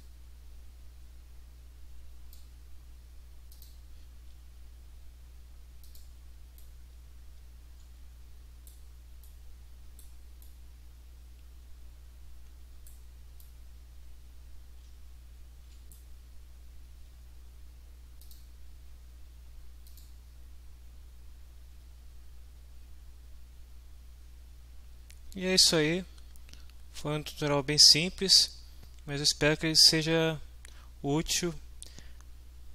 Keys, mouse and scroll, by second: 3.5 click, 3.8-4.6 middle drag, 5.8 middle click, 6.0 click, 6.6-7.1 right drag, 7.3 right click, 7.4 right click, 7.4 w, 9.2 right click, 9.4-10.0 middle drag, 10.0 right click, 10.4 right click, 10.6 middle click, 11.5 right click, 12.3 middle click, 12.9 right click, 12.9 middle drag, 13.4-15.1 right drag, 15.1 middle click, 15.1 s, 15.5 right click, 18.2 click, 19.9 click.